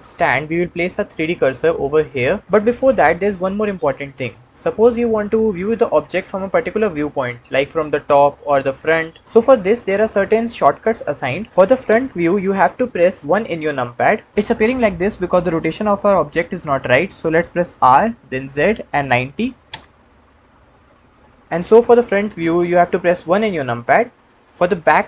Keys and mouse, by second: 5.4-7.3 middle drag, 13.2 KP_1, 17.5 r, 18.2 z, 19.0 KP_9, 19.1 KP_0, 19.5 KP_Enter, 21.0-21.4 middle drag, 23.2 KP_1.